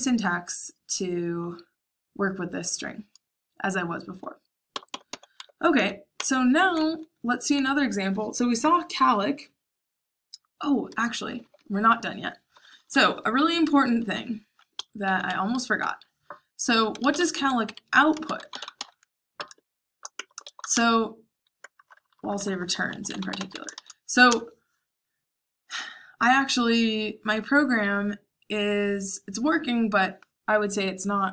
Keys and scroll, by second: 4.6-6.6 typing, 11.2-15.5 typing, 14.7 Escape, 16.6-22.6 typing, 24.2 space.